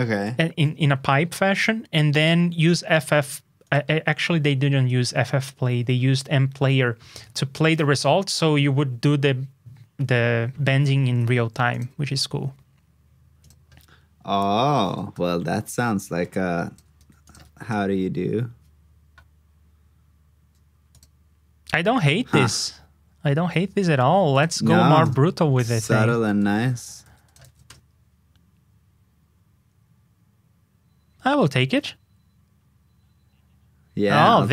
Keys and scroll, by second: 16.9 super+c, 17.4 super+v, 27.0 super+c, 27.4 super+v.